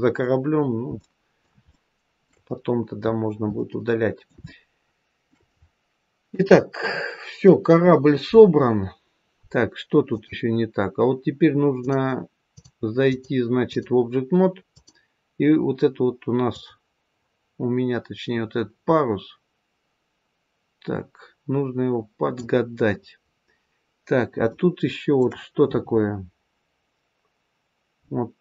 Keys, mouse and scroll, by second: 0.5-1.3 scroll down 2, 0.9 middle click, 1.7 shift+middle click, 2.4-3.0 scroll down 1, 3.0-3.5 scroll down 2, 3.5 middle click, 4.3 shift+middle click, 6.2 KP_3, 6.8-7.4 scroll down 2, 10.0 click, 11.7 click, 12.4 click, 13.0 click, 14.7 click, 16.4 click, 23.2-24.3 scroll up 1, 24.4 shift+middle click, 27.9-28.4 scroll up 2.